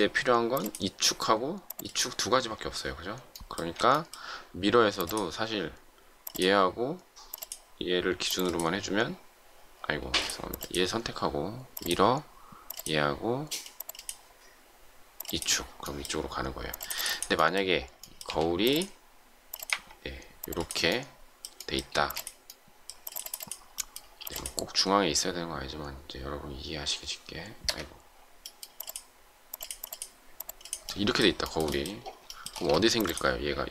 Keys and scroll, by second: 10.0 space, 18.2 q, 21.9 shift+space, 24.1 m, 27.6 Escape, 32.5 shift+space.